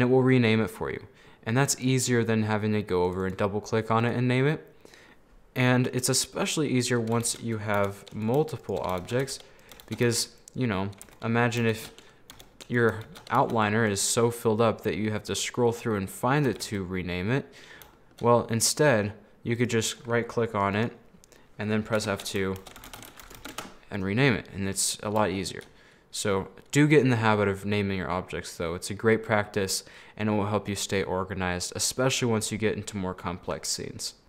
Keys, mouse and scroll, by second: 3.3 click, 4.8-5.2 scroll down 3, 5.2-6.8 middle drag, 6.8-7.4 scroll down 4, 7.4 shift+d, 8.7 right click, 9.4 shift+d, 10.0 shift+d, 11.1 a, 11.8 shift+d, 13.2 shift+d, 15.0-15.9 scroll down 2, 15.9-16.6 scroll up 11, 16.6 a, 16.8-18.4 middle drag, 18.4 scroll up 2, 18.7 middle click, 19.3 scroll down 2, 19.6-20.9 right drag, 22.0 F2, 24.8-28.3 middle drag, 29.3 scroll down 4, 29.4-32.5 middle drag, 33.8 scroll down 2, 33.9 middle click.